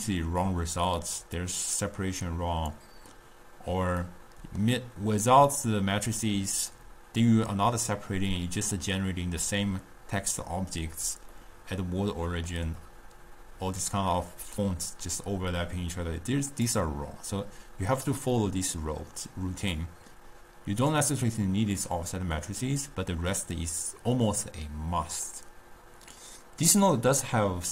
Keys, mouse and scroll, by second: 1.5-4.1 drag, 4.1-5.6 middle drag, 5.6-8.7 drag, 9.6 scroll up 1, 9.8 scroll down 1, 10.1 scroll up 1, 11.5-14.5 middle drag, 15.3 drag, 19.9-23.2 drag, 23.8-25.7 drag.